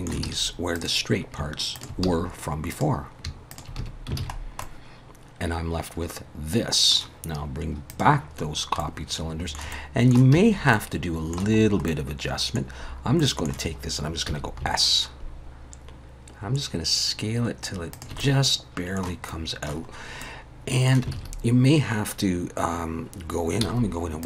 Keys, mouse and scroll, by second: 0.3 alt+a, 0.8 click, 1.8 shift+click, 2.1 f, 2.7 click, 3.6 shift+click, 3.8 f, 4.2 alt+a, 4.4 scroll down 2, 4.6 middle click, 7.9 click, 8.5-8.8 scroll up 1, 8.8 middle click, 9.7 middle click, 10.3 a, 10.7 middle click, 11.6 scroll up 2, 11.9 middle click, 12.7 scroll down 2, 13.2 middle click, 14.3 s, 18.2 middle click, 19.3 middle click, 19.9 scroll up 1, 20.2 middle click, 21.1 alt+a, 23.6 z.